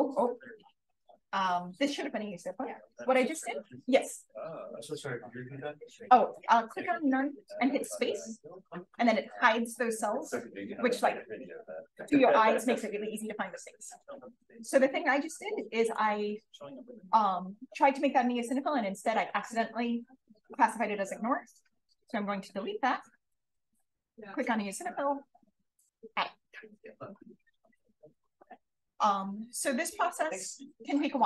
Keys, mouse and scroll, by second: 7.0 click, 15.8-20.3 drag, 22.4 click, 25.6 click, 31.1-31.2 scroll up 1.